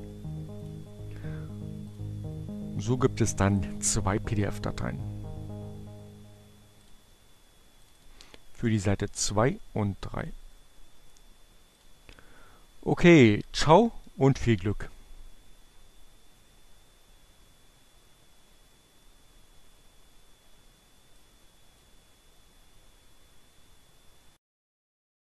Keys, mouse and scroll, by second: 0.9 click, 2.6 click, 6.3 click, 8.0 click, 10.4 click, 12.4 click, 21.0 click.